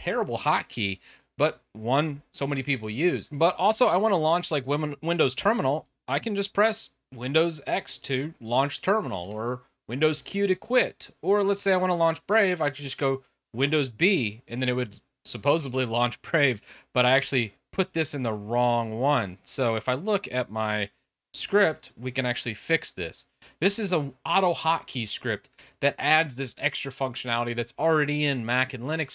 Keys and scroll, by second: 5.5 super+x, 9.2 super+q, 12.0 super+b.